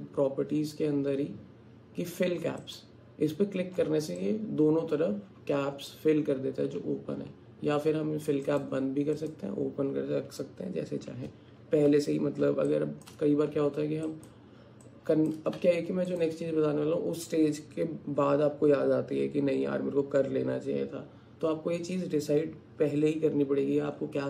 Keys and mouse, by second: 4.2-5.9 drag, 8.4 click, 9.2 click, 12.7 alt+shift+click, 14.1 alt+click, 14.9 alt+shift+click, 15.6 Tab.